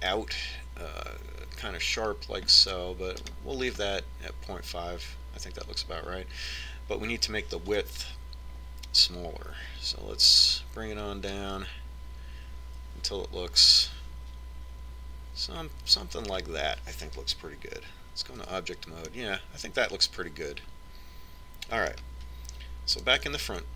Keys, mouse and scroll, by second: 9.2-11.0 drag, 19.9 Tab, 20.5-22.5 middle drag.